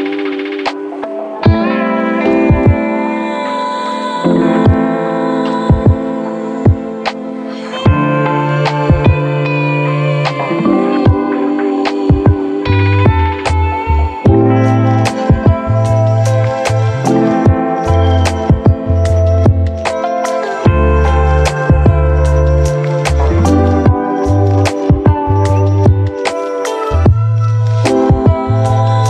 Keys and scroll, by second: 6.8 k, 7.4 j, 11.2 f, 12.1 v, 14.8 space, 15.3 f, 16.3 v, 17.5 space, 23.4 ctrl+d, 27.0 space, 27.6 f, 28.5 v.